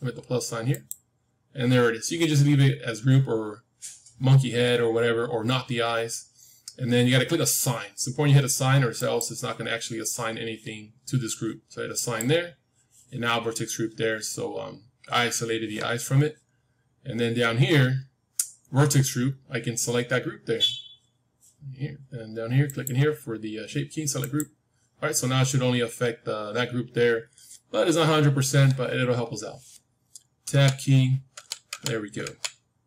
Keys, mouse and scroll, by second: 0.6-3.2 drag, 8.9-10.9 drag, 11.9-13.8 drag, 13.3-14.9 middle drag, 14.9-15.3 scroll down 1, 16.0-17.2 scroll down 1, 17.2-17.8 scroll down 1, 17.8-18.8 scroll down 1, 19.0-21.6 scroll up 1, 21.6 middle click, 22.6-24.6 drag, 22.6-24.3 scroll down 1, 27.9-31.3 middle drag, 30.4 Tab, 31.3 Tab, 31.6 Tab.